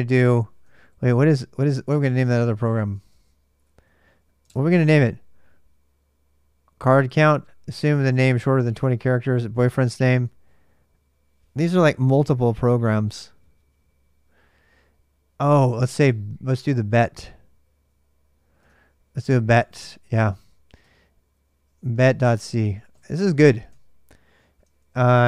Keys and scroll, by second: 0.5 ctrl+a, 0.6 ctrl+a, 2.4-3.3 typing, 4.2 super+Tab, 18.4 super+Tab, 19.0-25.2 typing.